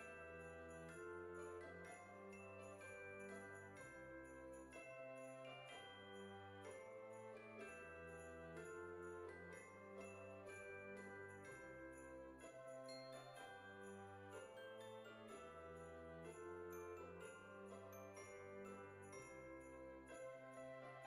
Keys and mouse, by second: 0.6 click, 1.1 Tab, 2.1 shift+middle click, 3.5 shift+middle click, 4.6 ctrl+z, 5.7 click, 7.9 click, 8.6 KP_4, 11.6 click, 12.8 click, 14.7 shift+click, 15.8 click, 17.3 shift+click, 18.1 shift+click, 19.5 x, 20.4 click.